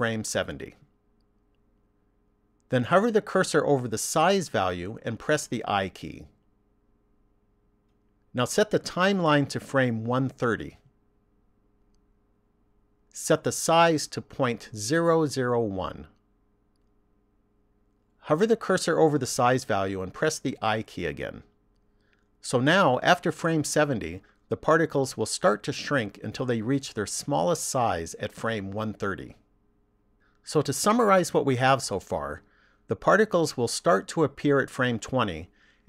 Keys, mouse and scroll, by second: 6.5 i, 9.7 click, 14.7 click, 16.6 KP_0, 21.0 i, 31.4 click.